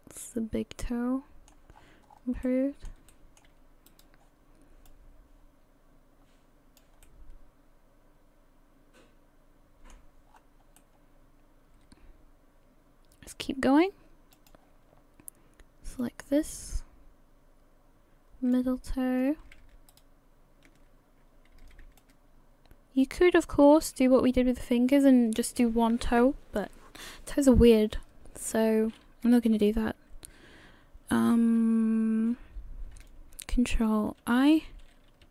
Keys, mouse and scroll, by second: 1.7-2.4 scroll up 9, 2.4 middle click, 3.1 shift+middle click, 3.9 right click, 4.9 click, 7.0 middle click, 10.3-10.8 scroll down 5, 10.8 middle click, 14.3 click, 16.0 click, 19.0-19.5 scroll up 1, 19.9 alt+shift+right click, 22.0 shift+click, 34.2 ctrl+i.